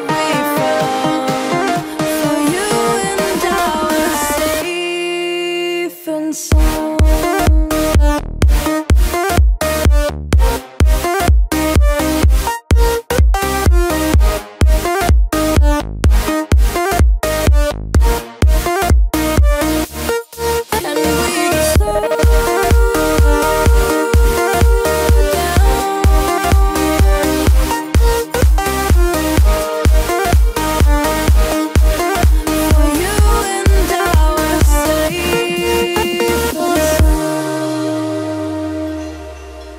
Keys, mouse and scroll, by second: 0.2-0.6 scroll up 1, 3.4 t, 4.0 click, 5.2-6.8 typing, 12.1 alt+click, 13.1 t, 13.3 click, 14.1 ctrl+z, 15.1 v, 16.1-17.6 alt+drag, 17.6 t, 17.9 click, 18.4 ctrl+a, 18.8-22.4 typing, 22.9 ctrl+a, 23.8 click, 25.8 click, 28.1 click, 30.5 click, 32.3 click, 33.3 i, 33.7 click, 35.2 v, 35.7 click, 37.7 i, 38.1 click, 39.4 v.